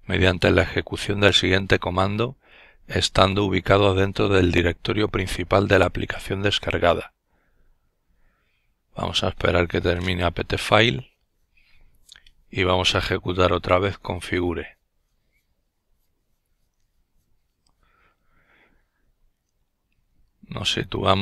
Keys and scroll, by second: 19.4 typing, 20.6 typing.